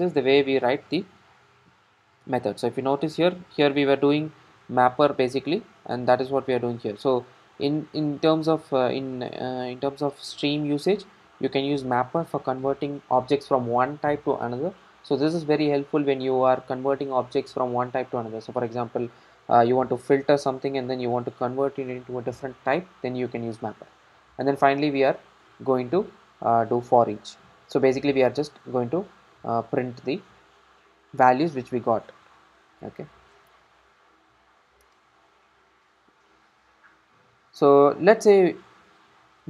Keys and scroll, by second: 0.6 ctrl+shift+super+F12.